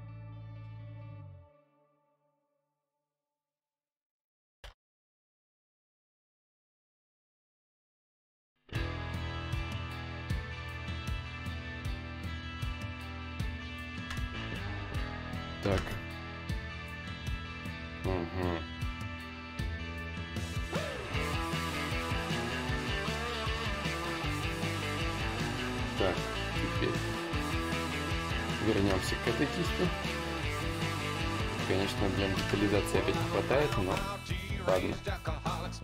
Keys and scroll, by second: 4.2 ctrl+/, 4.2 ctrl+z, 22.5 ctrl+z, 27.0-28.4 typing, 34.4 ctrl+z.